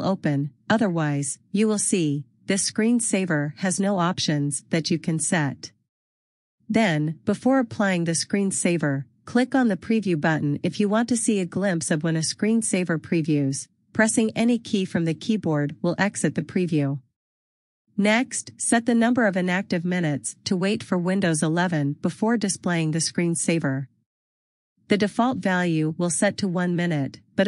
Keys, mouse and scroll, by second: 3.3 click, 11.2 click, 19.3 Escape, 22.7 click, 23.6 click, 24.1 double click, 24.5 click, 24.9 double click, 25.3 click, 25.6 double click, 25.9 click, 26.3 double click, 26.7 click.